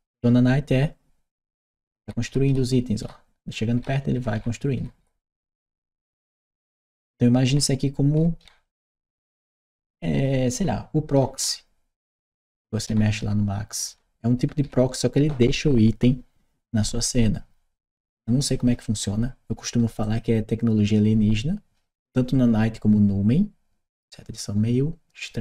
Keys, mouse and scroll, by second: 19.8 click, 25.2 click.